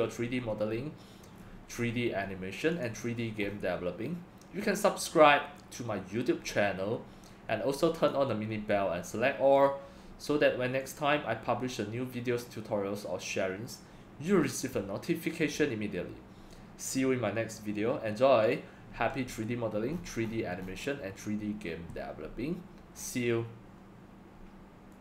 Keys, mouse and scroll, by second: 0.0-2.8 middle drag, 1.3-1.9 scroll, 2.8 click, 3.5 scroll up 1, 3.5-8.1 middle drag, 3.5-4.0 scroll, 6.4-7.3 scroll, 8.0 scroll up 3, 8.1-18.5 drag, 18.5-19.9 drag, 19.9-25.0 middle drag, 19.9-23.0 scroll, 23.0 scroll, 24.0-25.0 scroll down 5.